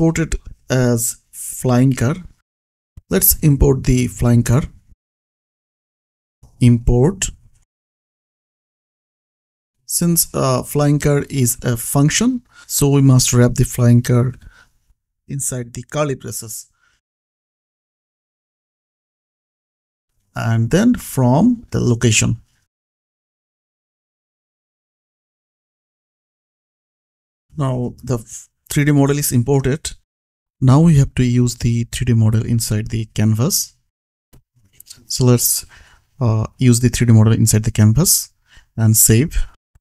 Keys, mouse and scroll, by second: 1.4 click, 4.0 click, 5.9 Return, 6.1-9.2 typing, 12.5 Escape, 13.3 click, 15.5 click, 16.0 ctrl+c, 16.5 click, 18.8 ctrl+v, 19.7-21.2 typing, 25.9 Tab, 27.5 click, 29.5 click, 31.7 click, 32.1 alt+z, 32.5 alt+click, 33.1 click, 35.5 ctrl+c, 35.9 click, 36.5 Return, 37.8 ctrl+v, 39.6 BackSpace.